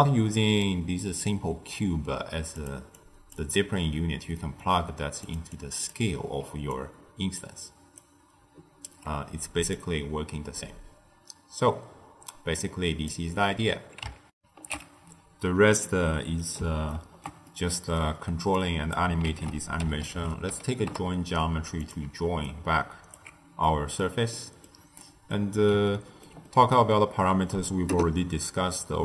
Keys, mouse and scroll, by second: 0.6 click, 2.5 click, 2.9 click, 4.3-5.2 middle drag, 5.2 click, 5.4 click, 6.3 d, 6.7 click, 7.3-7.8 d, 7.9 right click, 8.8 d, 9.7-12.8 drag, 14.2 ctrl+alt+shift+w, 15.8-18.5 middle drag, 18.5 click, 19.2 ctrl+a, 22.4-23.6 alt+right drag, 23.6-27.0 middle drag, 27.0-29.0 scroll up 1.